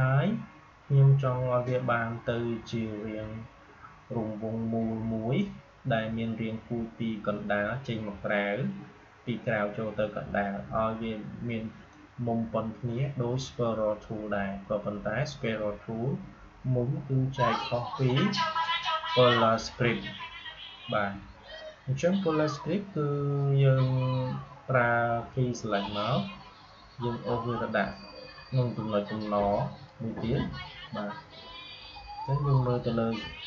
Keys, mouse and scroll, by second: 25.2-32.2 drag.